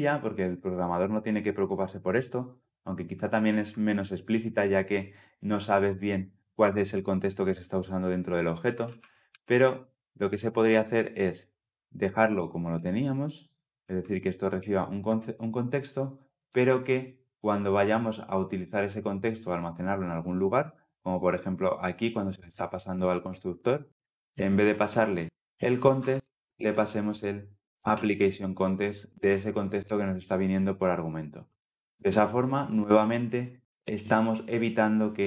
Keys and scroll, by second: 8.7 ctrl+z, 9.3 ctrl+z, 12.2 ctrl+b, 13.5 ctrl+z, 15.7 ctrl+z, 27.8 Return.